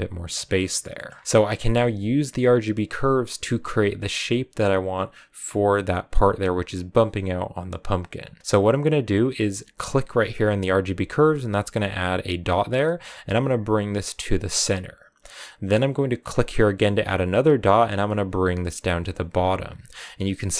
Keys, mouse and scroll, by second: 0.2-0.9 scroll down 4, 0.9-1.2 scroll up 2, 1.2 click, 1.5-11.9 middle drag, 11.9-16.0 drag, 16.7-19.5 drag.